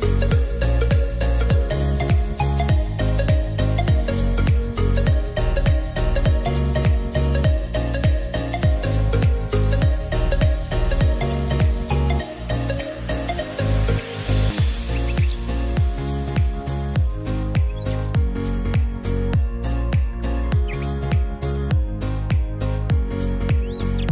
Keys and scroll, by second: 11.4 Delete, 17.5 Delete, 18.4 Delete, 20.4 ctrl+a.